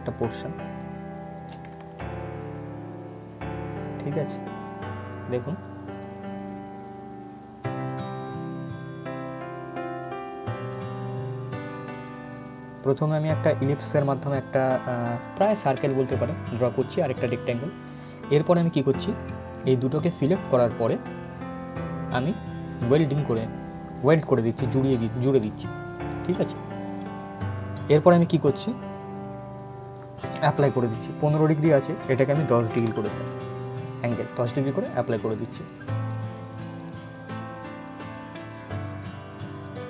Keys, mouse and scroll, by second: 0.4 shift+Num_Lock, 0.4 click, 1.7 ctrl+z, 2.1-11.6 drag, 16.9-22.4 drag, 24.1 scroll down 1, 25.6 click, 28.2 click, 31.2 click, 34.5 click.